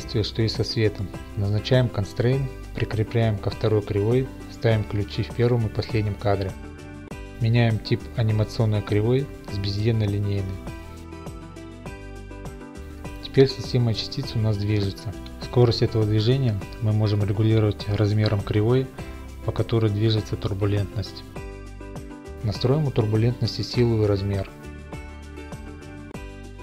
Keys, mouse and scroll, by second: 0.3 click, 1.1 click, 1.6 click, 2.2 click, 4.3 Left, 4.3 right click, 4.6 click, 5.6 Right, 5.6 click, 5.8 typing, 6.2 Return, 6.8 right click, 7.4 click, 10.0 a, 10.8 t, 11.6 click, 12.7 t, 12.8 click, 13.1 middle click, 13.3-14.3 scroll, 15.3 scroll, 17.0 click, 17.4 scroll, 18.8 click, 18.8 s, 20.1 s, 22.0 click, 22.7 click, 23.5 click, 23.7 5, 23.8 Return, 24.8 click, 25.1 middle click, 25.9 middle click, 26.2 ctrl+a.